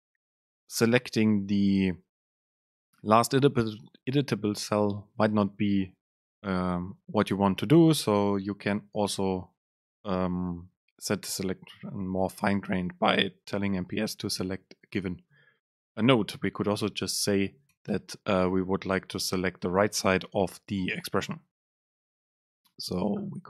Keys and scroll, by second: 17.8 BackSpace, 22.1 super+z.